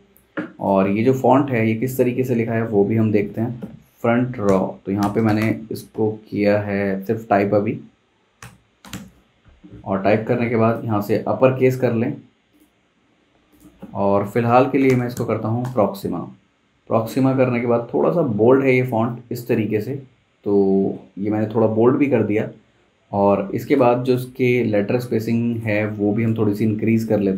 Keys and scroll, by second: 2.6 t, 4.4-6.5 typing, 8.2-9.4 typing, 11.2 Escape, 14.6-15.6 typing, 22.8 super+z, 26.2 shift+Page_Up, 26.4 shift+Page_Up.